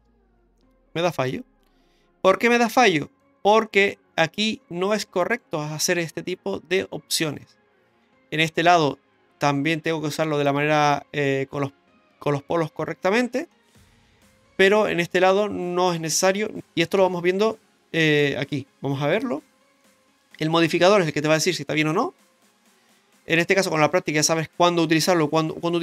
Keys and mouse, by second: 0.6-3.2 middle drag, 4.4 middle click, 8.0-8.7 middle drag, 13.5-15.3 middle drag, 16.6 middle drag, 17.0 Tab, 18.0 shift+middle click, 19.1 click, 19.8 middle click, 22.7 middle click, 23.8 shift+middle click.